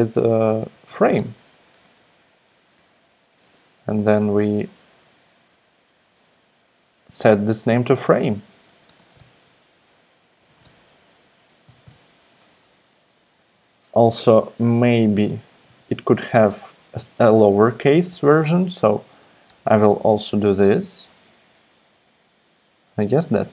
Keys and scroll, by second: 0.0-1.6 typing, 1.8 Right, 2.8 Return, 3.4-4.1 typing, 8.4-12.8 typing, 14.3 shift+super+Left, 14.7 super+c, 14.9 Right, 15.3 Return, 15.7 super+v, 17.3 BackSpace, 17.5 r, 17.8 BackSpace, 18.1 r, 19.4 BackSpace, 19.6 f.